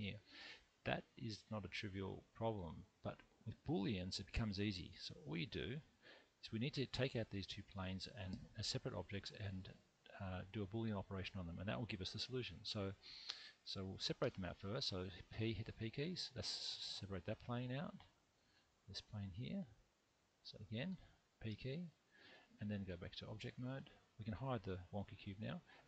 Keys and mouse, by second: 1.3-3.0 middle drag, 14.2 p, 18.7 shift+click, 21.5 p, 22.9 Tab, 25.2 h.